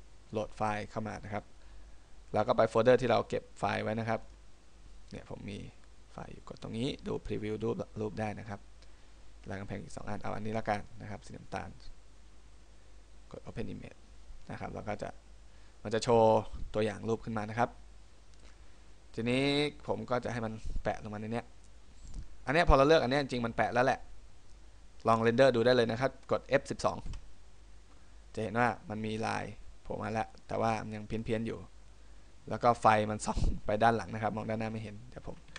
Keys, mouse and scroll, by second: 0.0 click, 13.8 click, 20.1 middle click.